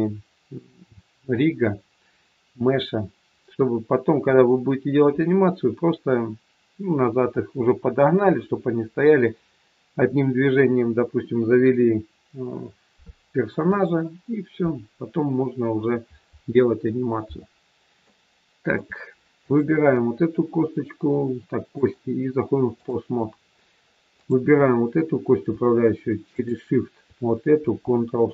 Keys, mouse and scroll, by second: 17.9 shift+middle click, 19.4 click, 21.5 click, 23.3-23.9 scroll up 1, 24.2 click, 26.2 shift+click.